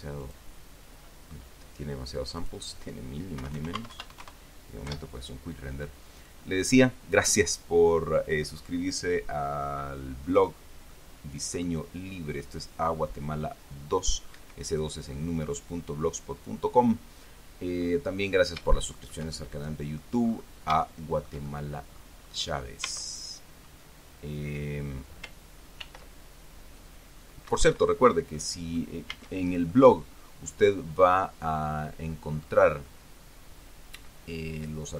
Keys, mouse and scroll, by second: 0.5 click, 1.2-2.1 scroll down 3, 2.7 click, 3.7 KP_1, 3.8 KP_0, 4.1 Tab, 4.2 KP_1, 4.4 KP_0, 4.5 KP_Enter, 5.2 F12, 10.2-10.6 scroll down 2, 11.2 middle click, 12.4-12.8 scroll up 2, 13.2 scroll down 2, 14.7 Escape, 15.5-18.3 drag, 18.5-18.8 scroll up 1, 19.0-20.5 shift+drag, 20.6-21.0 scroll up 1, 21.1-22.5 shift+middle drag, 22.2 click, 22.6-22.9 scroll up 2, 23.1 Tab, 26.1 ctrl+r, 27.8 Escape, 28.7 click, 29.4 a, 30.0-32.9 drag, 33.1-33.7 scroll up 1, 33.7 scroll up 1, 34.4-34.8 scroll down 1.